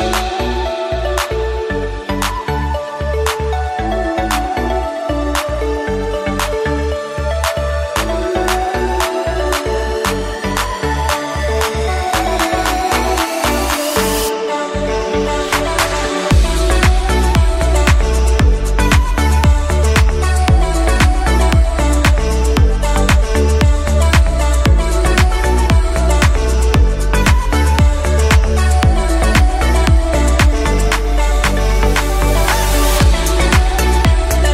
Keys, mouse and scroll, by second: 2.8-3.3 scroll up 2, 3.3-5.5 middle drag, 5.5 Tab, 6.1 s, 9.5 g, 12.0-12.4 scroll up 1, 12.4 Tab, 13.6 e, 14.9-15.3 scroll down 2, 15.3-15.9 middle drag, 15.9 Tab, 16.4 middle click, 17.0-17.7 scroll up 1, 17.7 e, 21.4-22.4 scroll up 2, 22.4 a, 22.9 middle click, 23.7 KP_1, 24.9 g, 27.9 scroll up 1, 28.8 ctrl+r, 33.3 Tab, 34.3 click.